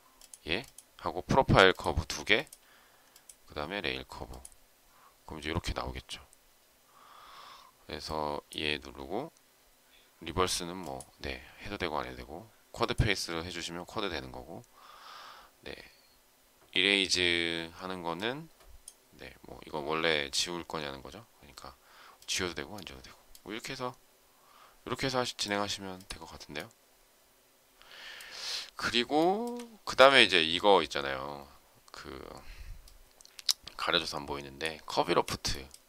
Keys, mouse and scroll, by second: 29.1 shift+middle click.